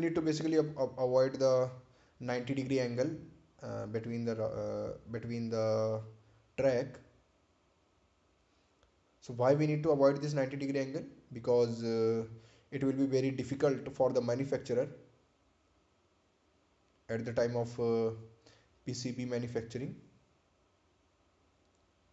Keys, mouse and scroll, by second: 3.6 click, 9.2 ctrl+click, 13.9 ctrl+click.